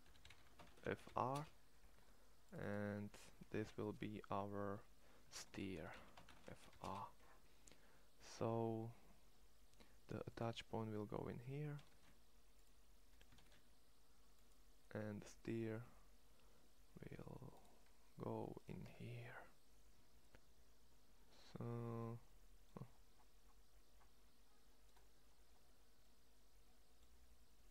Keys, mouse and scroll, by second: 5.7 e, 11.6 shift+s, 13.1 shift+s, 14.8 middle click, 15.6 Tab, 16.4 Tab, 17.7 middle click, 18.8 Tab, 19.0 middle click, 22.7 middle click, 24.8 middle click, 25.2 middle click, 26.0 middle click, 27.5-27.7 right drag.